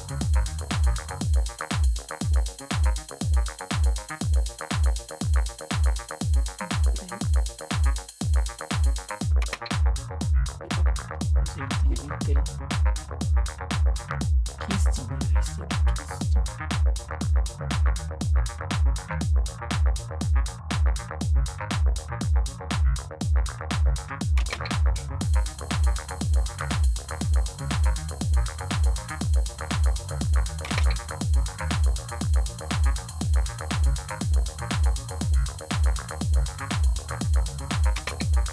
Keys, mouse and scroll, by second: 9.3 space, 24.3 space, 30.5 space, 37.8 space.